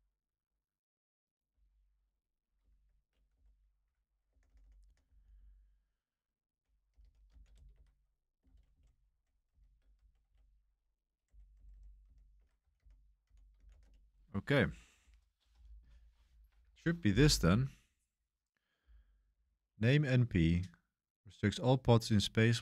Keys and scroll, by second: 1.5 0, 2.7-14.2 typing.